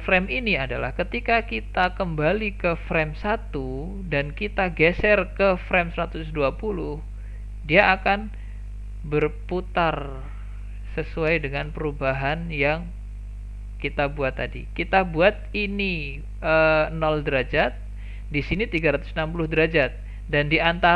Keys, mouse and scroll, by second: 2.3-5.3 drag, 8.7-11.7 drag, 17.2 click.